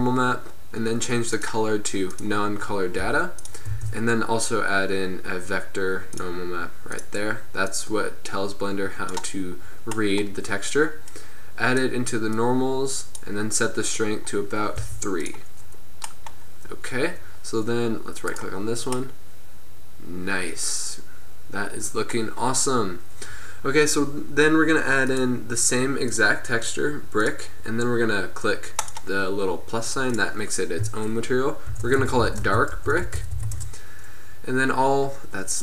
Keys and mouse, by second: 0.4-1.0 drag, 1.4-3.5 drag, 3.2 g, 3.8 shift+a, 7.7-11.0 drag, 11.1-16.4 drag, 18.4 right click, 19.1-20.3 middle drag, 21.1 middle drag, 25.1-28.0 drag, 28.9-32.0 drag.